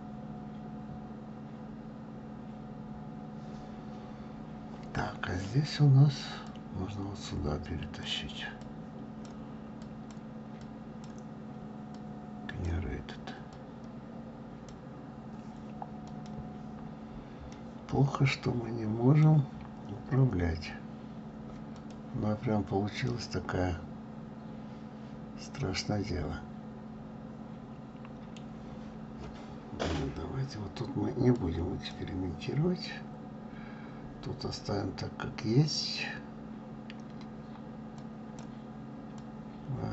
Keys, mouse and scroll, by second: 8.0 click, 9.4 click, 9.9-11.2 drag, 12.6 click, 14.8 click, 17.1-17.7 scroll down 2, 17.7-19.7 middle drag, 19.7-20.4 scroll up 5, 20.4-21.7 scroll down 2, 21.7 click, 23.4-26.3 middle drag, 31.2-31.7 drag, 38.5 click, 39.2 click.